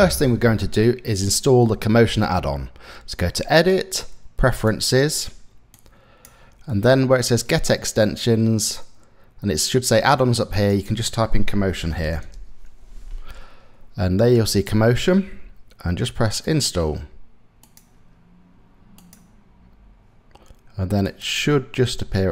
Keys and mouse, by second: 3.3-4.3 drag.